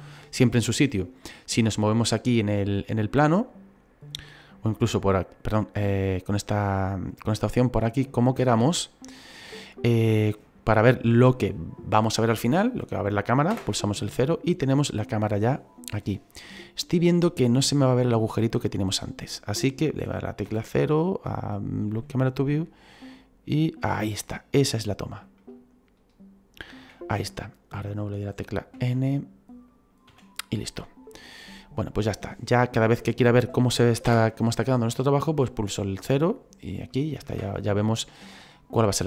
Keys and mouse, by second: 1.2 middle click, 4.4 click, 5.0 middle click, 5.9 click, 6.3 middle click, 8.1 shift+middle click, 10.2 middle click, 13.4 KP_0, 20.4 n, 21.5 click, 21.9 n, 22.5 middle click, 25.3 shift+middle click, 28.7 n, 29.6 click, 30.0 n, 31.8 middle click, 32.9 middle click, 34.0 KP_0, 36.7 click.